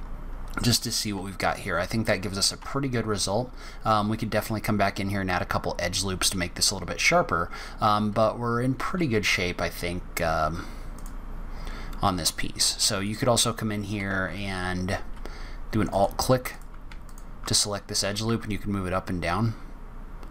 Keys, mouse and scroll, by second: 2.6 Tab, 3.3 scroll up 1, 10.8 click, 12.9 click, 14.0 2, 15.8 click, 16.4 click, 17.0 alt+click, 17.3 alt+click, 17.9 g.